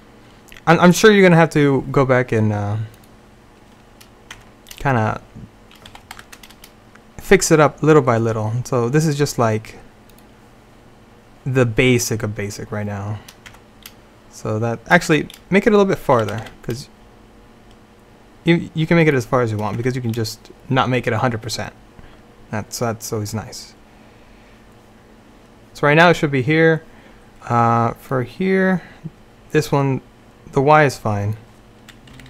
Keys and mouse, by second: 3.0-6.0 drag, 4.4 Tab, 6.0 g, 13.6 Tab, 15.2 Tab, 16.3 g, 19.9 Tab, 28.2-30.9 drag, 32.2 Right.